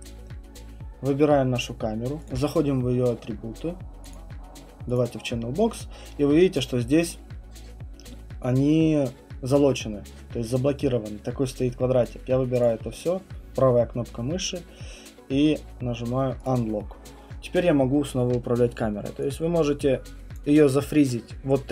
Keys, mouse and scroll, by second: 0.5 click, 2.3 click, 4.1 click, 5.0 click, 12.6 click, 13.0 right click, 16.5 click, 18.1 click.